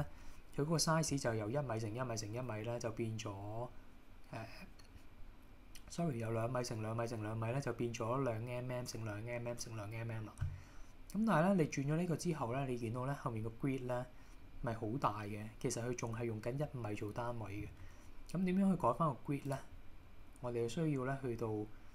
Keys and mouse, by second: 11.7 middle click, 19.7-21.9 drag.